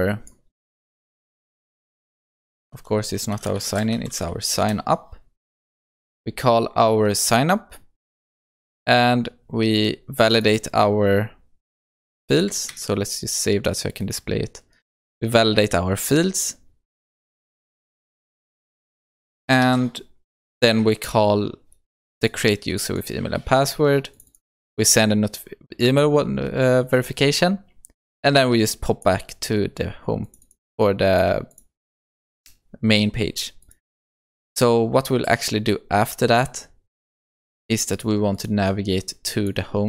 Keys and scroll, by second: 2.6 shift+F6, 12.8 ctrl+s, 19.7 ctrl+s.